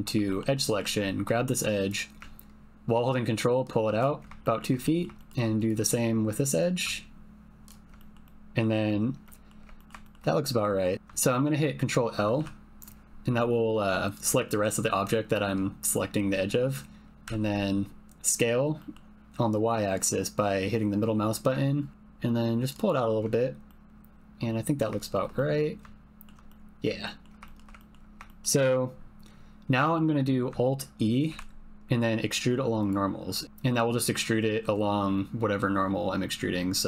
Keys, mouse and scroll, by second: 0.2 shift+click, 0.6 click, 1.3 shift+click, 1.8 click, 4.9 middle click, 5.1 shift+middle click, 5.6 click, 6.6 click, 8.0 middle click, 8.3 middle click, 9.2 middle click, 9.7 ctrl+middle click, 10.1 shift+click, 10.4 click, 10.9 ctrl+z, 12.4 ctrl+l, 17.2 s, 18.7 click, 23.6 click, 24.5 middle click, 25.0 shift+middle click, 25.3-26.3 middle drag, 26.4 middle click, 27.0 ctrl+middle click, 27.4 shift+middle click, 27.7 ctrl+middle click, 28.2 shift+middle click, 29.8 shift+middle click, 31.2 alt+e.